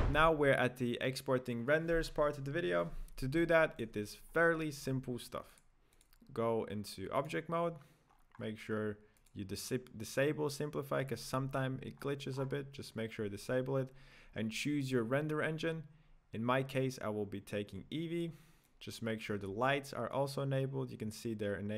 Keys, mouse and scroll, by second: 3.4-5.4 shift+middle drag, 5.4-7.1 drag, 7.1 right click, 8.1 scroll up 2, 8.3-11.0 scroll down 5, 11.0 click, 11.9-15.3 scroll up 11, 18.6-21.6 drag.